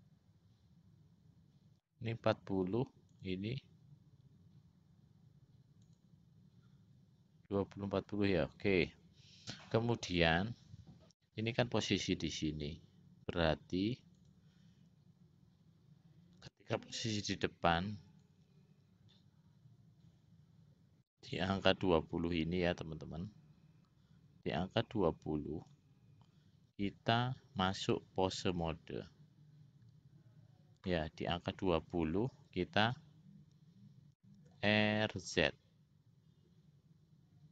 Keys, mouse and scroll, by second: 3.3 click, 6.0 click, 14.4-15.4 drag, 18.7-26.2 drag, 27.8-29.5 drag, 34.9 r.